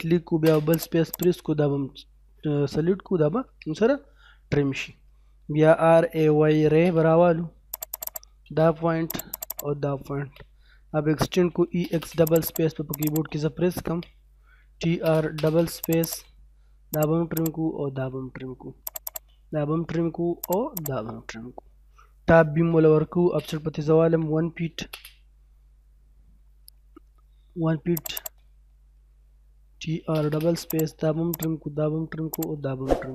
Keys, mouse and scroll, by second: 0.3 space, 0.7 click, 3.6 middle click, 5.7-6.7 typing, 7.7 click, 8.1 right click, 8.7 space, 9.1 click, 9.5 right click, 11.1-11.7 typing, 12.3 click, 14.2-15.2 typing, 15.8 click, 18.0 scroll up 1, 18.9 click, 19.4 scroll down 1, 20.1 scroll up 1, 20.4 click, 21.1 scroll down 1, 21.3 middle click, 23.0-24.8 typing, 27.9 click, 28.5 middle click, 29.4-30.3 typing, 30.7 click, 33.0-33.1 scroll up 1.